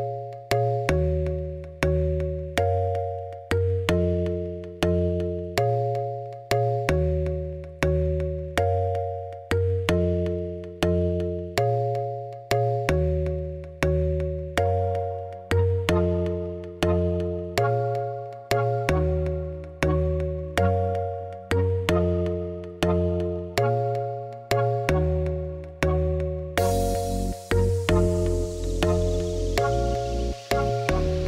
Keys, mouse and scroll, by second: 0.2 ., 0.7 r, 2.0 r, 2.8 r, 3.6-4.0 scroll down 3, 4.0-6.6 drag, 6.6 middle click, 7.5 g, 8.0 g, 8.6 KP_0, 9.1 click, 9.5 KP_0, 10.8 click, 14.2 click, 30.2-30.8 scroll up 2, 30.8-31.2 scroll down 11.